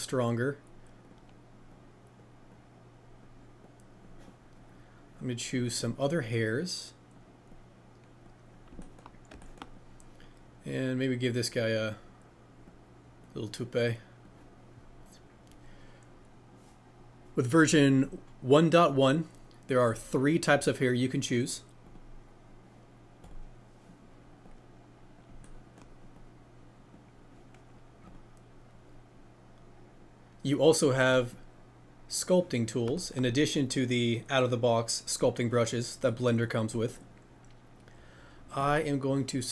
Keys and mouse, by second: 1.0 click, 3.8-5.9 drag, 22.1-25.2 drag, 26.3-28.1 drag, 31.1 click, 38.6 click.